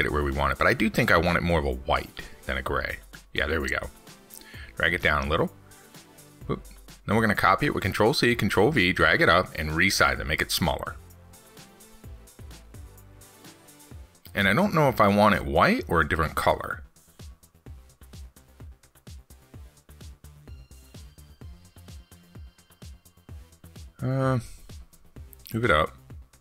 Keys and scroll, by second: 7.2 ctrl+z, 8.4 ctrl+c, 8.6 ctrl+v.